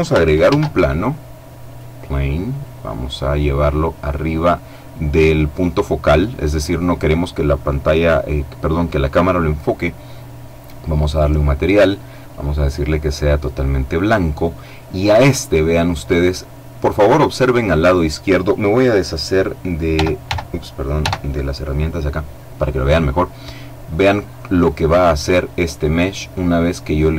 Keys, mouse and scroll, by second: 0.0 shift+a, 1.2 click, 2.1-4.7 drag, 10.6 click, 11.7 click, 12.5-13.2 scroll up 2, 19.5 n, 20.5 t, 26.0 click.